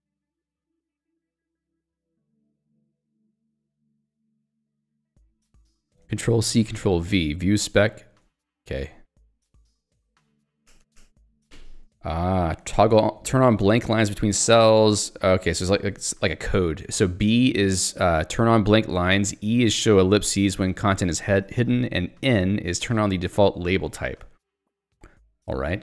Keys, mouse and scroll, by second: 0.1 ctrl+d, 0.4 j, 5.7 k, 6.8 ctrl+v, 10.1 Tab, 10.7 ctrl+g, 11.2 Escape, 11.5 j, 16.7-19.2 typing, 20.2 k, 20.6 j, 22.6 k.